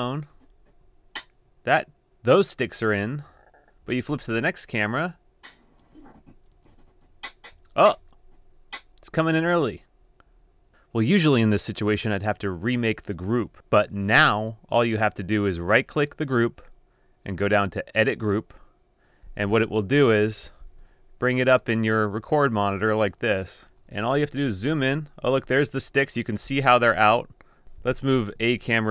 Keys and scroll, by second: 0.1 shift+Right, 0.3 shift+Right, 0.8 shift+Right, 3.4 Down, 4.7 shift+Right, 5.2 shift+Right, 5.3 shift+Right, 5.4 shift+Right, 5.5 shift+Right, 5.6 shift+Right, 5.6 shift+Right, 5.7 shift+Right, 5.9 shift+Right, 6.5 shift+Right, 6.7 shift+Right, 6.9 shift+Right, 7.1 shift+Right, 7.5 shift+Left, 8.0 shift+Left, 8.4 shift+Right, 20.5 shift+Tab, 20.8 d, 23.7 super+], 24.1 super+], 24.2 super+], 24.2 super+], 24.3 super+], 24.5 super+].